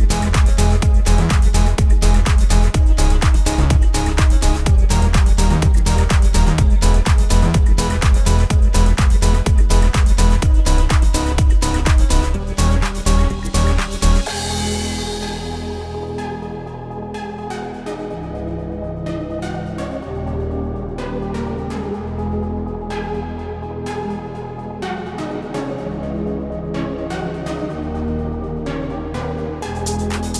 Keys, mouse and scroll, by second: 0.0 space, 0.5 click, 1.5 ctrl+z, 2.0 space, 2.5 click, 3.2 alt+scroll down 1, 4.9-17.6 drag, 17.6 right click, 18.2 click, 21.9-28.4 shift+drag.